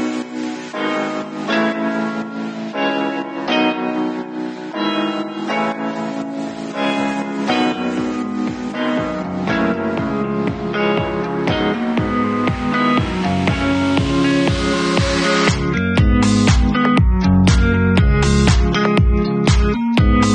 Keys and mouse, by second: 2.9-3.5 middle drag, 3.5 click, 3.6-9.6 middle drag, 9.6-10.2 drag, 10.2-10.5 middle drag, 10.2 r, 10.5-11.7 drag, 11.3 w, 11.7-15.7 middle drag, 12.5 ctrl+s, 15.7 click, 15.7-18.5 middle drag, 18.5 click, 19.3-20.3 middle drag.